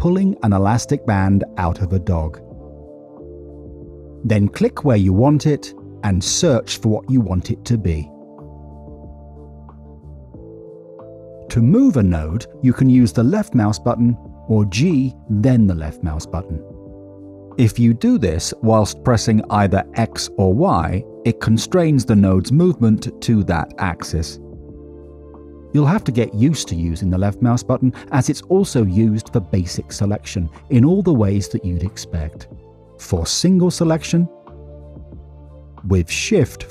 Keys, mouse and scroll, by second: 9.1 click, 10.5 middle click, 11.2 middle click, 13.5 click, 16.8-28.0 typing, 19.0 click, 29.0 middle click, 30.1 middle click, 33.3 click, 33.7 click, 34.1 click, 34.6 click, 35.4 drag, 35.8 click.